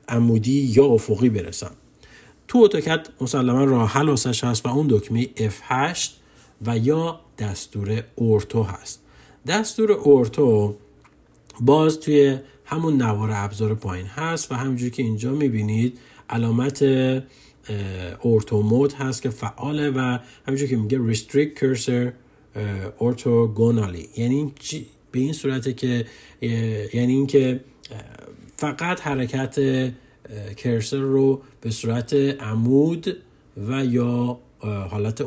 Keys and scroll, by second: 5.3 F8.